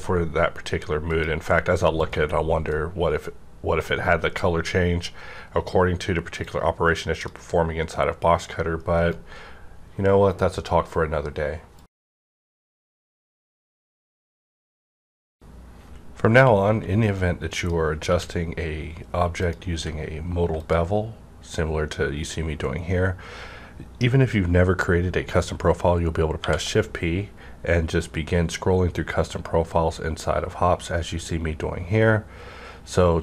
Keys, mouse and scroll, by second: 1.9 click, 3.0-11.5 drag, 9.0 right click, 18.0 right click, 18.0 click, 19.4 click, 19.4 q, 20.5 click, 23.4 click, 23.4 q, 26.4 p, 27.3 scroll up 1.